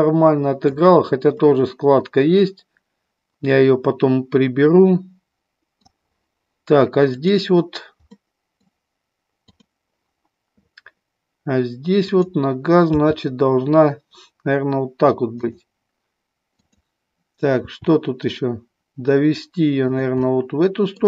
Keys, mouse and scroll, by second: 1.3-5.8 middle drag, 7.1 click, 8.1 middle click, 9.4 click, 11.9 click, 13.0 g, 15.4 click, 16.6 click, 17.7 r, 19.9 click, 20.2 middle click.